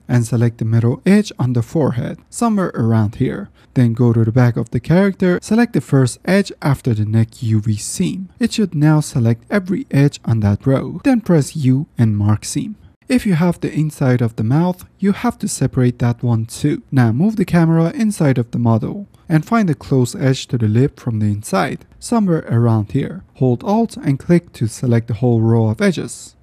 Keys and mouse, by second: 2.9-3.5 middle drag, 3.7 shift+middle click, 4.8-5.1 middle drag, 8.6-10.0 middle drag, 11.7 u, 13.3 middle click, 15.3 F10, 15.4 ctrl+z, 15.9 middle click, 16.5 z, 17.5 shift+middle drag, 18.7-19.1 middle drag, 19.5-19.8 shift+middle drag, 20.6-21.1 middle drag, 22.1 shift+middle click, 23.8-24.3 middle drag, 25.0 alt+click, 25.6-26.4 middle drag.